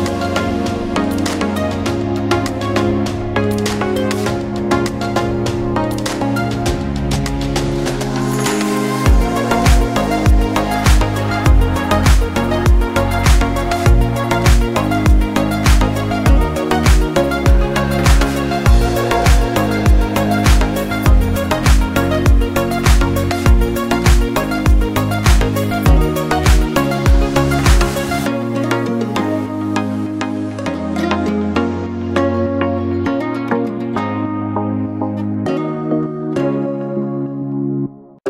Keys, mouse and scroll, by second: 0.1 click, 15.6 click, 17.8 click, 21.9 scroll down 1, 22.4 scroll up 1, 22.7 scroll down 1, 23.7 click, 27.8 scroll down 1, 28.2 scroll up 1, 29.2 click, 30.5 scroll up 1, 31.2 click.